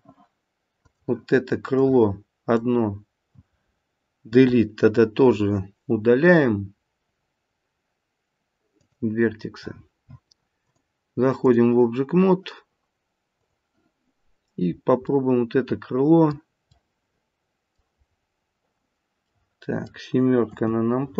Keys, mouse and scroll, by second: 0.9 click, 1.7 click, 4.4 Delete, 10.6 click, 13.4 click, 15.0 middle click, 15.3 middle click, 17.3 middle click, 18.0-19.3 scroll up 4, 19.3 middle click, 19.3-20.4 scroll up 1, 20.4 KP_7, 20.9-21.1 scroll down 1.